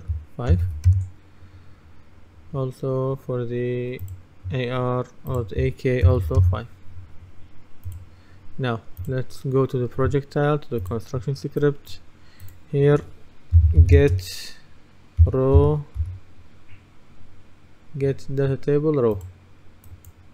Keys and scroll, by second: 0.6 KP_5, 0.9 Return, 6.1 KP_5, 6.5 Return, 13.6-14.0 typing, 15.0-16.6 typing.